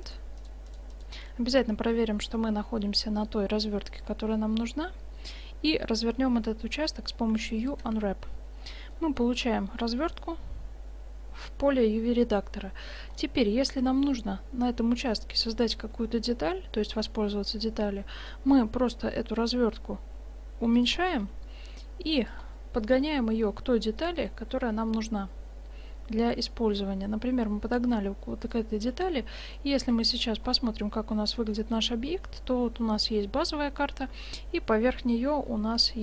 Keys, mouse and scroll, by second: 4.1-6.3 middle drag, 7.3 u, 8.3-11.8 middle drag, 13.2-15.2 middle drag, 18.7 s, 21.3 g, 22.5 click, 23.0 g, 24.2 s, 27.8 g, 29.0 Tab, 29.5-30.5 middle drag, 30.0 shift+z, 31.9 middle drag, 32.3 middle drag, 33.5-36.0 middle drag.